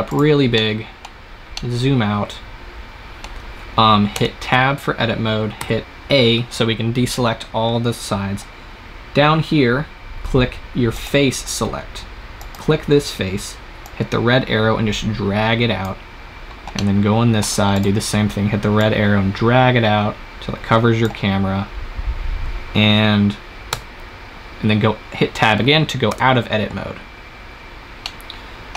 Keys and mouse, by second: 0.2 click, 0.8-1.9 drag, 4.0 Tab, 5.5 a, 10.8-13.3 drag, 14.5 click, 17.6-20.2 right drag, 23.6 Tab, 26.1 KP_0.